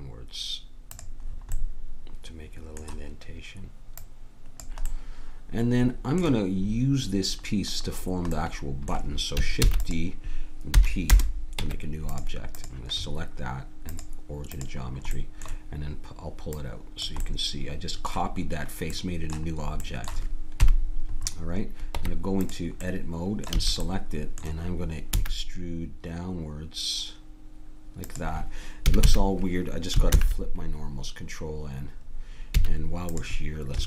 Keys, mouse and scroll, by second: 4.0-5.8 drag, 5.0 right click, 9.7 shift+d, 10.8 p, 11.6 Tab, 12.5-15.6 drag, 16.6-17.6 drag, 17.6 middle click, 20.6 KP_1, 21.9 Tab, 23.6 a, 25.1 e, 28.9 a, 29.1 a, 30.1 ctrl+n, 33.1 click.